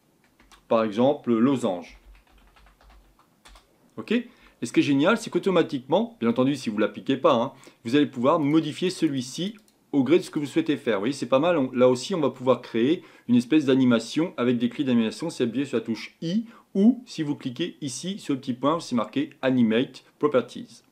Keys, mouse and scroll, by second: 3.4 click, 8.5-13.4 drag.